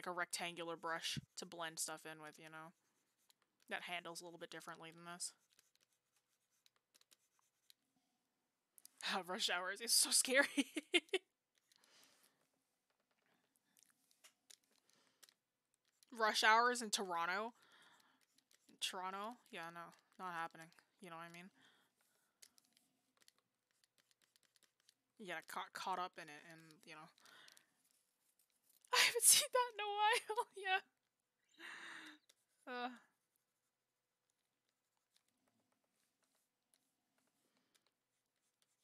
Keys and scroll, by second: 12.5-13.0 scroll down 1, 13.0-13.3 scroll up 1.